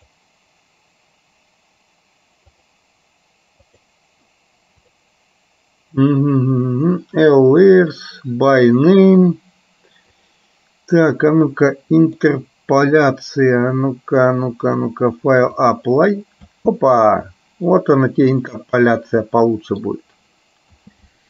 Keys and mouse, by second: 2.7-4.9 drag, 10.3-12.3 drag, 14.9-16.1 drag, 16.7 space, 18.1-20.2 middle drag, 20.8 space.